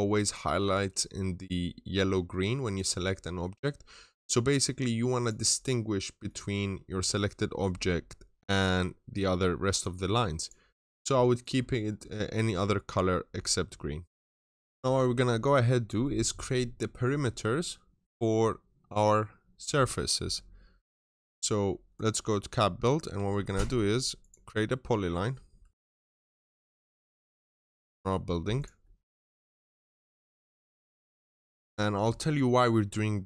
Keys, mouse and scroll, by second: 22.6-22.9 scroll up 1, 22.9 typing, 24.0 click, 24.0 typing, 25.4 Escape, 25.7 click, 25.7 Delete, 25.7 Return, 25.7-27.4 typing, 26.0 click, 27.1 middle click, 27.9 scroll up 1, 28.4 click, 28.7 middle click, 28.9-29.7 scroll down 1, 29.8 click, 30.1 middle click, 30.3 scroll down 1, 30.5 right click, 31.1 click, 31.5 middle click.